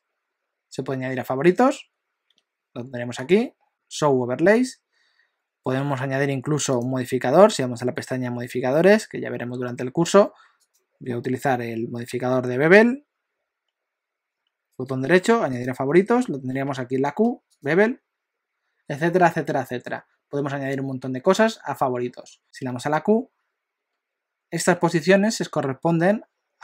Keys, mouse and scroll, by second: 2.3 q, 3.7 q, 6.7 click, 10.6 click, 16.6 q, 22.6 q.